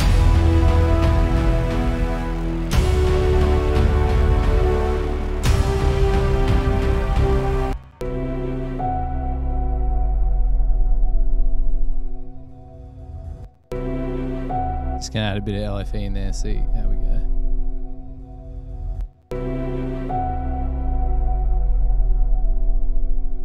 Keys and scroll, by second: 2.6 super+=, 7.8 space, 8.0 space, 13.6 space, 13.7 space, 19.1 space, 19.3 space.